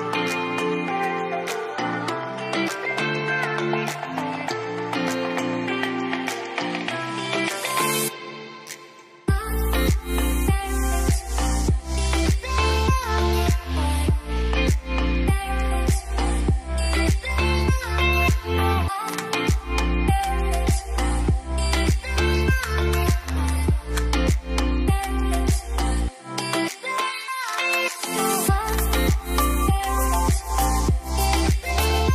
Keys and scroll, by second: 3.6 ctrl+s, 8.4-9.4 typing, 11.8-13.3 typing.